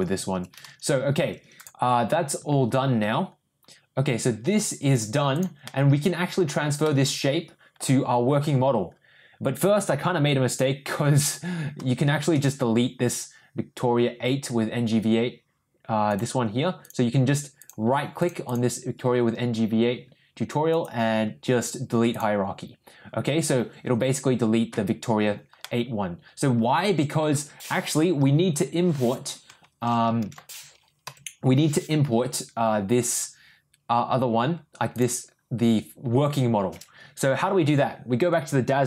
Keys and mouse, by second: 5.0 click, 5.7-6.3 middle drag, 6.8-7.7 middle drag, 10.5 click, 16.0-16.6 right drag, 16.8 click, 17.5 click, 18.4 click, 20.7-22.1 right drag, 25.6-27.1 middle drag, 31.0 ctrl+n, 34.9 click.